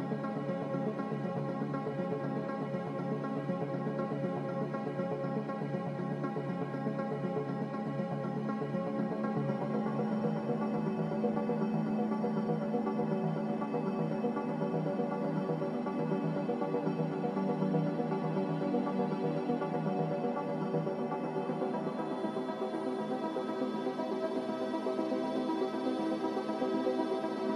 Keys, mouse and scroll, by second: 14.6 z, 16.9 ctrl+c, 17.1 ctrl+r, 20.7 Escape, 26.8 ctrl+c, 27.3 ctrl+v.